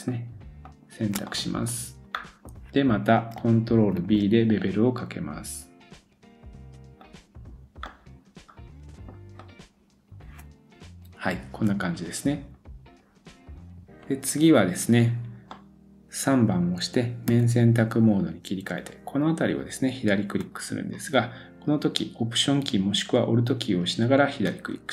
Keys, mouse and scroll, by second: 0.1 shift+click, 1.3-3.4 middle drag, 4.0 ctrl+b, 7.9 middle click, 9.4 click, 9.7-10.9 scroll down 1, 15.5 middle click, 17.3 3, 18.5-23.8 middle drag, 24.4 alt+click.